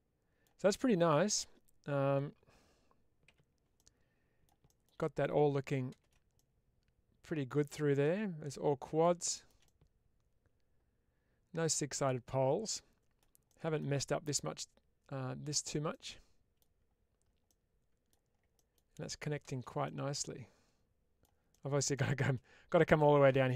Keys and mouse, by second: 3.2 /, 3.7-4.4 middle drag, 5.0 middle click, 6.3-8.9 middle drag, 9.6-13.6 middle drag, 14.6-15.4 middle drag, 15.9-16.5 middle drag, 17.3-18.0 middle drag, 18.5 middle click, 19.3 shift+space, 19.7-21.1 middle drag, 21.5 middle click.